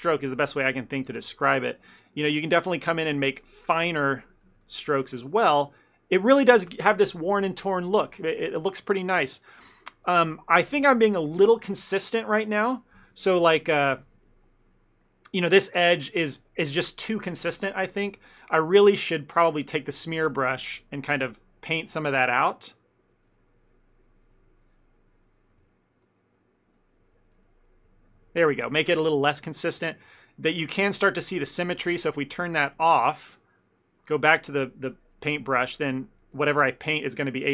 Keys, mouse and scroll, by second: 0.4 ctrl+middle click, 0.7 ctrl+middle click, 1.1 f, 1.3 middle click, 1.7 ctrl+middle click, 2.4 click, 2.7 click, 3.7 click, 4.3 click, 4.7 click, 4.9 click, 5.0 ctrl+middle click, 5.3 middle click, 5.5 ctrl+middle click, 5.8 middle click, 8.8 ctrl+middle click, 9.1 middle click, 9.5 middle click, 9.7 ctrl+middle click, 9.8 shift+middle click, 9.9 shift+middle click, 10.1 ctrl+middle click, 10.4 middle click, 10.6 f, 10.9 ctrl+middle click, 11.1 middle click, 12.5 middle click, 12.7 ctrl+middle click, 12.8 ctrl+middle click, 14.0 f, 14.3 ctrl+middle click, 14.8 middle click, 15.2 middle click, 18.2 ctrl+middle click, 18.4 middle click, 19.9 click, 20.6 f, 21.2 click, 21.9 click, 23.0 click, 25.6 click, 25.7 shift+middle click, 26.1 click, 26.8 click, 27.5 ctrl+middle click, 27.8 ctrl+middle click, 27.9 shift+middle click, 27.9 middle click, 28.3 middle click, 29.1 middle click, 29.3 ctrl+middle click, 29.5 ctrl+middle click, 29.9 middle click, 30.1 ctrl+middle click, 30.5 middle click, 30.7 ctrl+middle click, 32.3 click, 32.6 click, 34.3 click, 34.7 f, 35.7 click, 36.0 click, 37.2 click.